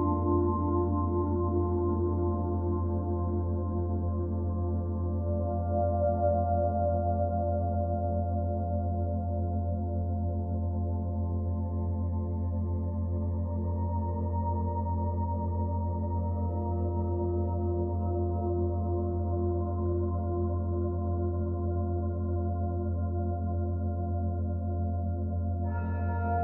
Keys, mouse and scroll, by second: 0.3-0.8 scroll up 5, 0.8 Tab, 1.1 middle click, 2.5 alt+middle click, 2.8 shift+middle click, 3.0-3.9 scroll up 4, 3.9 z, 4.7 click, 5.0 b, 5.6 g, 7.1 e, 7.4 g, 8.6 g, 11.4 click, 12.0 g, 12.8 z, 13.1 scroll down 1, 13.2-14.8 middle drag, 14.8 Tab, 15.0-15.6 scroll down 3, 15.6 scroll down 7, 15.8 b, 16.8 o, 19.0 ctrl+s.